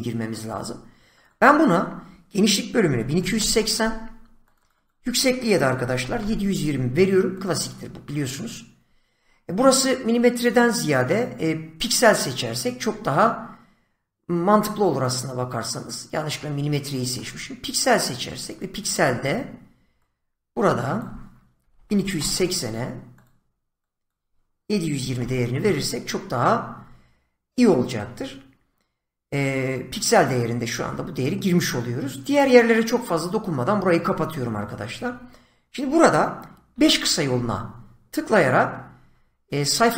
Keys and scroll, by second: 2.5-3.8 typing, 5.5-6.6 typing, 21.3-22.6 typing, 24.4-25.6 typing, 36.6 5.